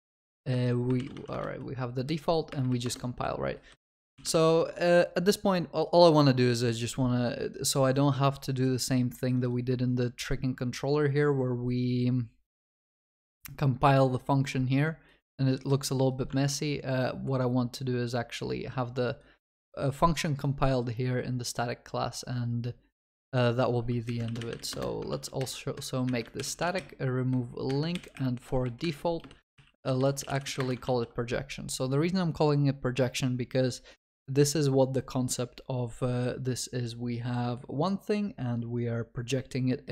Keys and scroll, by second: 0.3 ctrl+BackSpace, 4.4 ctrl+s, 16.4 ctrl+Tab, 24.8 Return, 25.1 ctrl+s, 26.4 ctrl+y, 28.8 shift+F6, 34.8 ctrl+s.